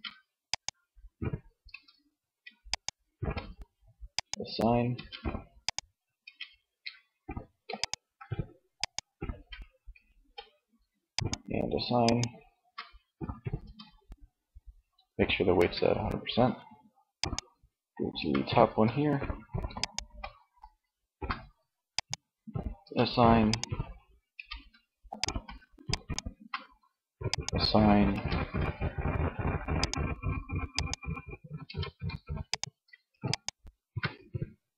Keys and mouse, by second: 0.7 Tab, 3.9 Tab, 6.2 Tab, 11.7 Tab, 12.7 Tab, 14.7 Tab, 17.3 Tab, 22.0 Tab, 23.5 Tab, 27.2 Tab, 30.7 Tab.